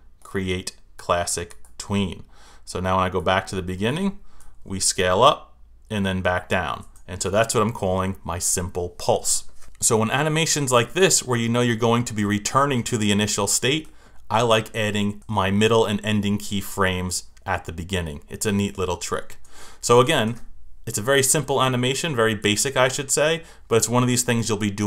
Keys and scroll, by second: 4.7 Return, 6.8 Return, 11.0 Return, 12.6 Return, 16.9 Return, 19.9 Return, 22.4 Return.